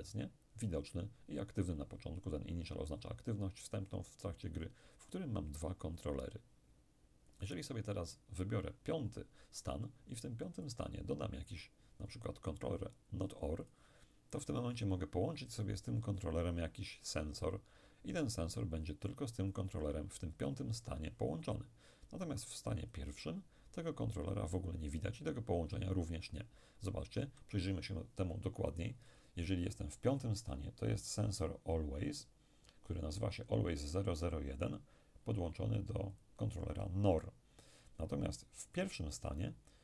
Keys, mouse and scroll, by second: 7.4 click, 10.7 click, 13.7 click, 16.0 click, 22.9 click, 29.2 click, 36.2 click, 38.8 click.